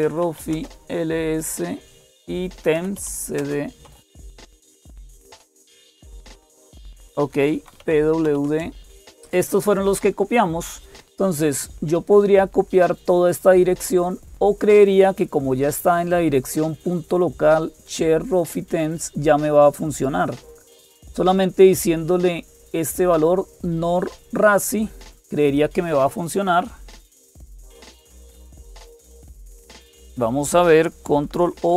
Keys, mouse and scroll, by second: 0.0-31.7 typing, 19.7 click, 27.3 Down, 27.9 Up, 31.3 ctrl+o.